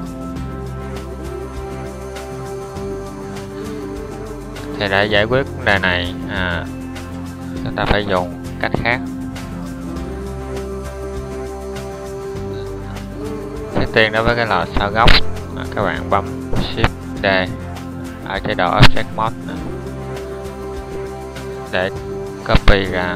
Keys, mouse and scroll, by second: 11.6 Up, 12.6 Down, 16.9 Tab.